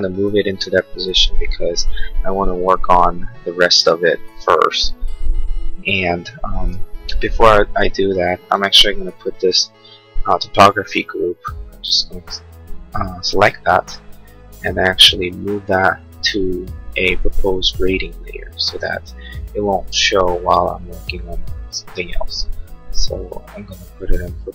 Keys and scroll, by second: 1.2 Escape, 7.1 space.